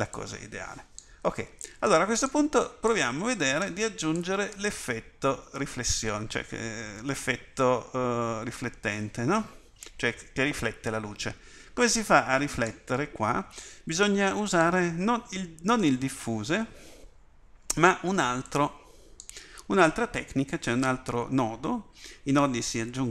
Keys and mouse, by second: 4.2 click.